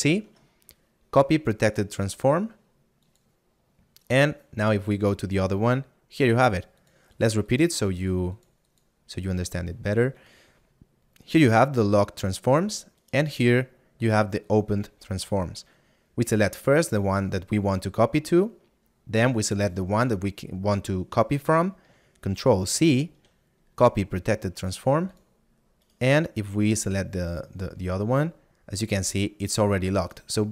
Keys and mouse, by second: 3.1 click, 13.1 right click.